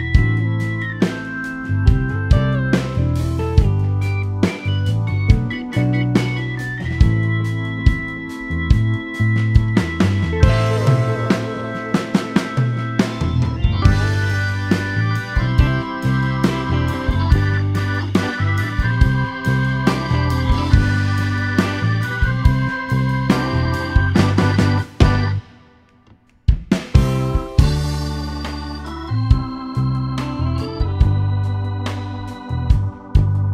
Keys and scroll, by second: 6.8 e, 9.0 ctrl+s.